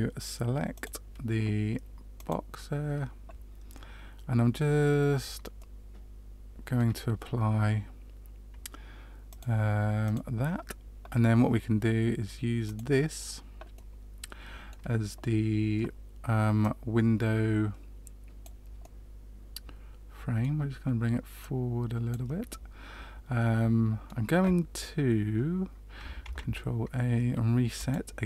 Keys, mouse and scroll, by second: 0.7 click, 5.5 middle click, 9.2 click, 12.6 click, 13.7 middle click, 16.5 click, 18.8 middle click, 21.3 click, 22.4 middle click, 26.2 ctrl+a.